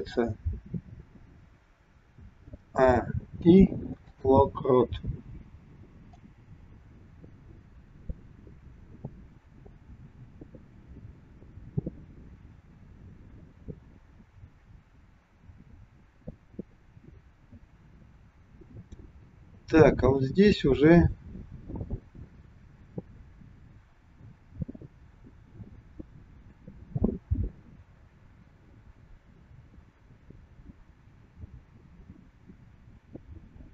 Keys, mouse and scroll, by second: 2.5 a, 3.3 i, 6.2 click, 6.7 click.